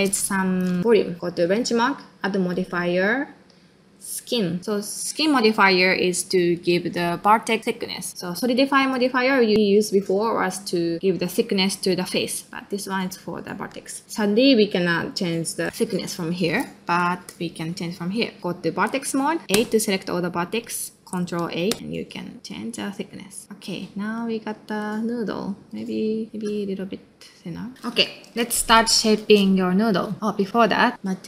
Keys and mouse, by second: 0.8 middle click, 1.5-4.3 drag, 4.6 middle click, 8.9-14.0 drag, 14.0 middle click, 16.6 middle click, 17.1 shift+middle click, 18.1 click, 18.4 ctrl+space, 19.5 a, 23.4 middle click, 24.0 ctrl+middle click, 24.6 ctrl+middle click, 25.0 middle click, 26.0 middle click, 26.4 ctrl+a, 28.7 click, 29.6 middle click, 30.4-31.2 drag.